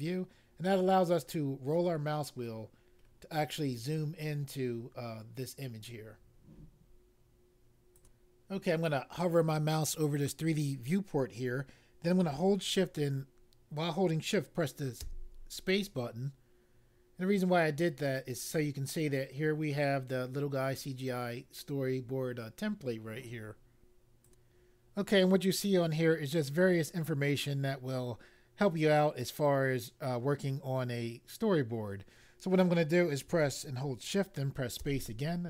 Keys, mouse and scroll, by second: 1.3-1.9 scroll up 1, 1.9-2.5 scroll up 1, 2.5-3.8 scroll up 2, 7.9 click, 7.9 click, 15.0 shift+space, 17.0-18.2 scroll up 1, 24.2 click, 34.8 shift+space.